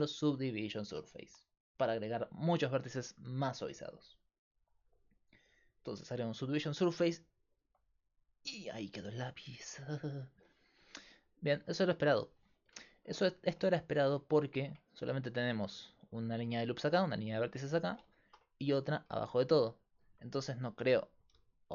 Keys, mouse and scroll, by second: 1.3-3.5 drag, 3.5-5.9 right drag, 7.2-12.5 middle drag, 12.9-13.9 middle drag, 13.9 Tab, 15.6-17.3 right drag, 17.9-19.3 middle drag, 19.3-21.3 right drag, 21.3-21.7 d, 21.5-21.7 drag.